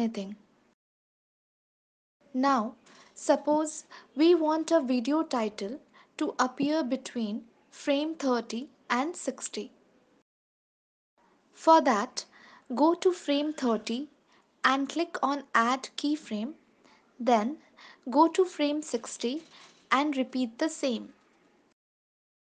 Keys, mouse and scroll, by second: 2.1 click, 2.6 click, 6.5 ctrl+s, 7.3 space, 8.5 space, 9.6 click, 13.1 click, 16.2 click, 18.0 ctrl+s, 19.8 click, 20.9 ctrl+s.